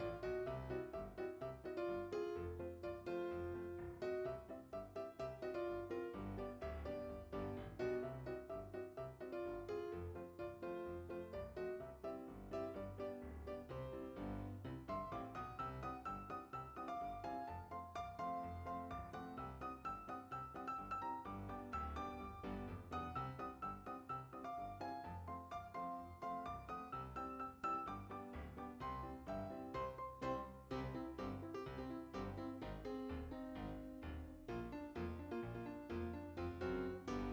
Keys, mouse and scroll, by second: 0.2 middle click, 0.6 f, 1.2 click, 1.9 r, 2.0 right click, 2.3 middle click, 3.2 click, 3.8 click, 4.8 click, 5.6 click, 6.6 shift+click, 7.4 click, 7.6 click, 8.5 click, 9.5 c, 10.0 click, 10.3 middle click, 10.6 right click, 10.8 ctrl+middle click, 11.3 f, 11.7 click, 12.1 right click, 12.3 middle click, 12.8 click, 13.8 shift+click, 14.4 click, 15.3 click, 15.7 right click, 16.0 right click, 16.0 middle click, 17.1 click, 17.2 f, 17.7 click, 18.1 c, 19.1 click, 21.4 click, 22.6 click, 22.9 g, 23.1 shift+z, 24.0 click, 24.2 click, 26.0 shift+b, 26.6 shift+click, 27.3-27.9 scroll down 3, 27.9 scroll up 1, 28.2 click, 29.2 click, 29.9 click, 30.1 click, 30.3 click, 31.0 right click, 31.2 middle click, 31.8 <, 32.1 ctrl+middle click, 32.7 click, 34.0 shift+s, 34.8 click, 36.0 <, 36.7 n.